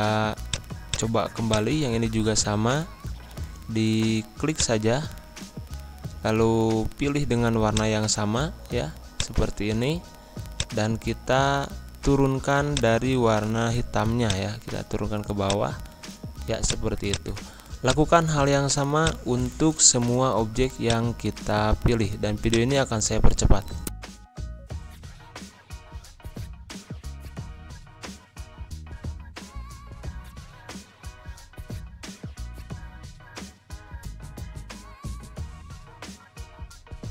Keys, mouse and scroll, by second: 0.5 click, 2.6 g, 4.5-25.4 drag, 25.5-28.5 drag, 28.8 z, 28.9 click, 30.7 g, 31.1-37.1 drag.